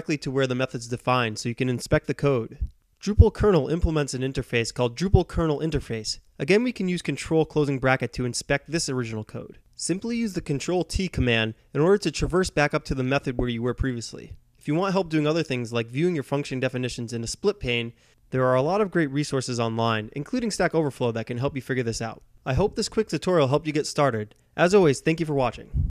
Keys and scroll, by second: 0.6-1.8 typing, 3.6 ctrl+], 3.6 typing, 6.9 ctrl+t, 7.9 ctrl+t, 12.0 alt+Tab, 12.4 alt+Tab.